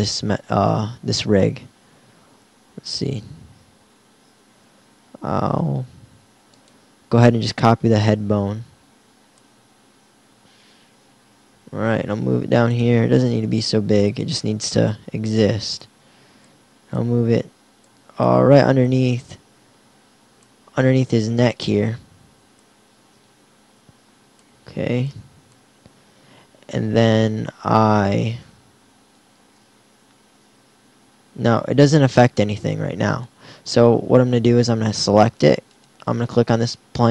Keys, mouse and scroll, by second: 0.2 Tab, 4.6 shift+d, 11.1 g, 12.3 g, 13.3 s, 14.8 r, 19.2-20.8 drag, 22.6-24.4 drag, 28.1 Tab, 28.9 Tab, 29.3 Tab, 31.1 r.